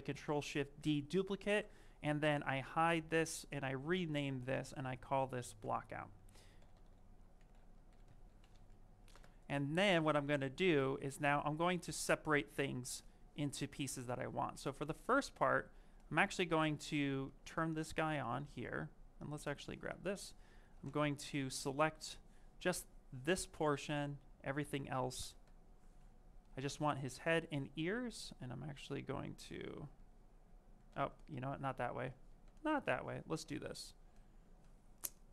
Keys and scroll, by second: 7.7 shift+-, 8.1 o, 9.0 Return, 29.3 ctrl+z.